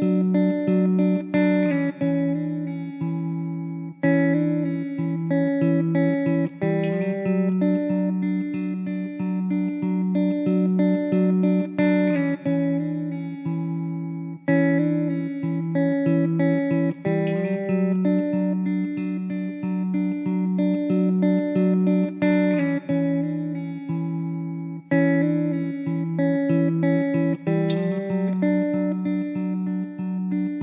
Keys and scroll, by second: 0.6 k, 4.9 3, 6.2 e, 7.9 1, 10.3 Tab, 11.8 Tab, 13.0 k, 17.0 1, 21.7 Tab, 23.1 ctrl+z, 23.3 ctrl+z, 27.3 Tab, 29.9 shift+d.